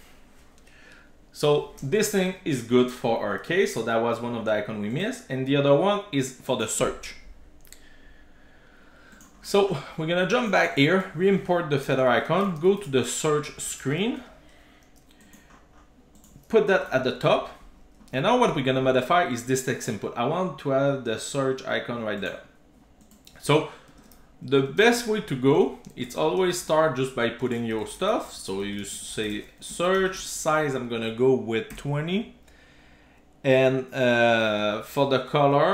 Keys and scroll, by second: 11.0 super+c, 12.0 shift+super+o, 16.9 super+v, 25.2 Return, 35.4 Return, 35.5 Return.